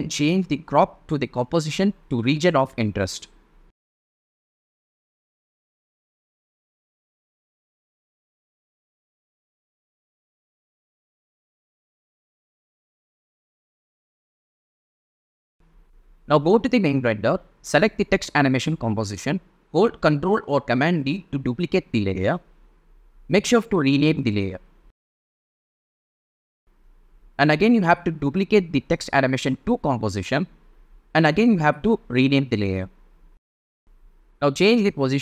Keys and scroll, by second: 21.9 super+d, 24.0 Return, 24.7 Right, 25.3 BackSpace, 25.8 2, 28.6 super+d.